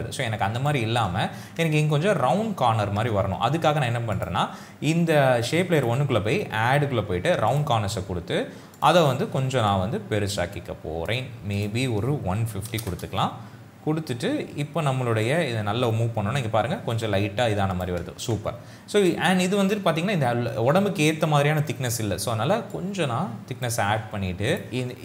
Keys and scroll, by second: 12.4 KP_1, 12.8 KP_0, 12.9 Return, 18.5 ctrl+z.